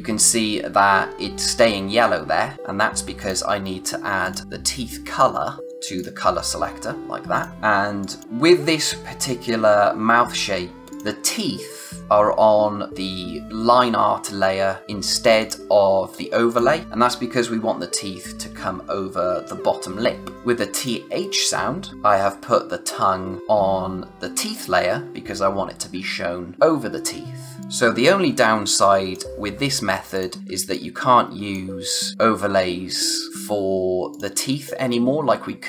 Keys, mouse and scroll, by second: 2.5 space, 2.6-3.1 scroll up 1, 3.1 click, 5.6 click, 7.5 scroll up 1, 7.6 space, 8.0 click, 8.1 space, 10.9 click, 15.3 click, 20.3 click, 27.6 click, 28.7 click, 29.4-30.1 scroll down 1, 30.1 click, 30.4 space, 30.7 click, 30.9 space, 34.1 click.